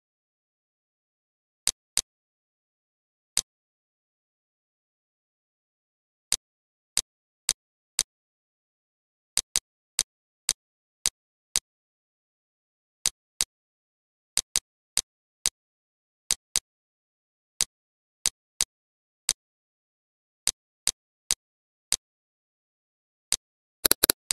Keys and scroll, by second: 0.3 z, 2.8 space, 3.8 ctrl+d, 8.9 ctrl+/, 12.1 ctrl+/, 12.8 ctrl+z, 16.0 ctrl+/, 17.3 ctrl+z, 17.9 Delete, 22.8 ctrl+shift+f.